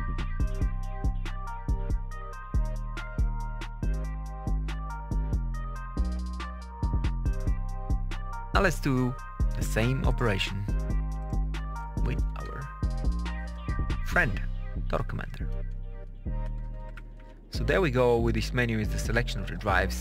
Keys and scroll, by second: 12.2 Tab, 15.4 Tab, 16.3 Page_Up, 17.0 alt+F1, 19.2 Up, 19.7 Down.